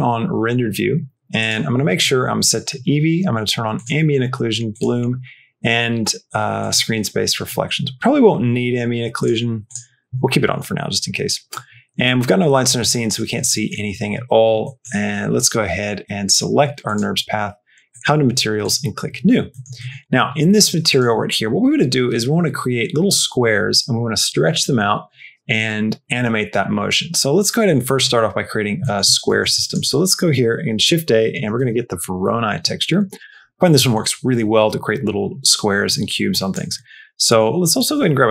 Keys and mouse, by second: 3.6 click, 4.6 click, 6.5 click, 9.1 click, 9.5 click, 13.3 shift+middle click, 14.6 shift+middle click, 17.8 click, 18.5 click, 19.6 middle click, 21.0 middle click, 28.7 middle click, 29.1 shift+a, 33.6 middle click, 36.2 click, 36.6 middle click, 36.9 middle click, 37.3 shift+a.